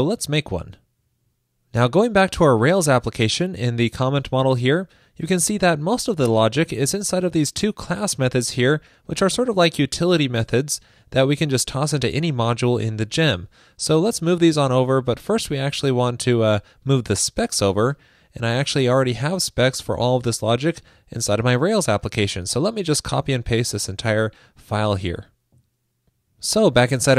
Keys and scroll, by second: 13.4 super+c, 23.8 super+a, 24.8 super+c.